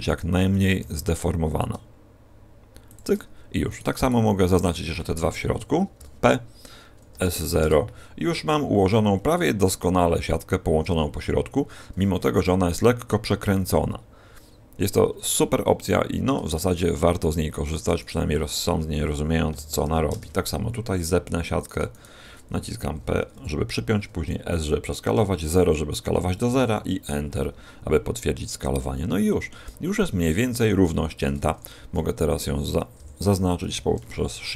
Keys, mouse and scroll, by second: 0.4 right click, 0.7 g, 2.9 shift+click, 3.6 right click, 3.9 shift+right click, 6.0 p, 7.1 s, 11.1-12.9 scroll down 2, 15.0-15.5 scroll up 1, 15.5-16.5 scroll up 8, 16.5 shift+middle click, 17.5 right click, 17.9 shift+right click, 19.4 p, 19.7 s, 21.5 right click, 21.8 shift+right click, 22.8 p, 24.2 s, 28.1-28.9 scroll down 2, 28.9 shift+middle click, 29.7-30.2 scroll down 1, 30.2-30.8 scroll down 4, 30.8 shift+middle click, 31.4 a, 33.5 shift+l.